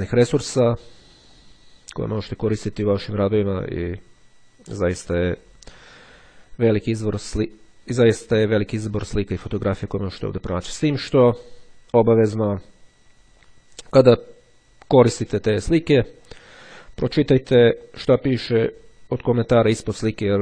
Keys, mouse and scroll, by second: 1.4 click, 5.4 click, 10.6-11.7 scroll down 1, 13.4-14.0 scroll down 1, 14.9-15.5 scroll up 1, 15.9-16.9 scroll down 1, 19.3-20.4 drag.